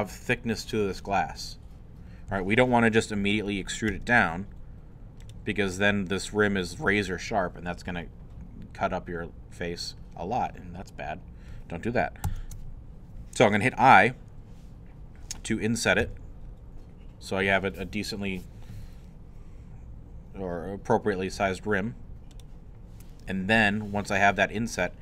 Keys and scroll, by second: 3.9 e, 12.3 ctrl+z, 16.0 i.